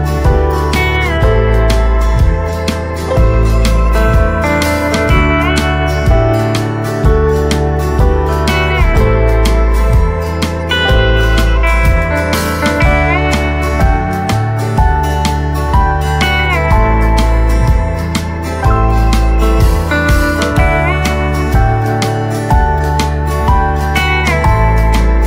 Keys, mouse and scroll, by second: 3.2 typing, 6.1 right click, 6.7 click, 7.0 right click, 8.9 click, 9.3-11.2 right drag, 11.2 ctrl+z, 12.2 click, 12.6 right click, 13.2 ctrl+z, 14.6 click, 15.0-17.2 right drag, 17.2 scroll down 1, 17.5 right click, 18.4 click.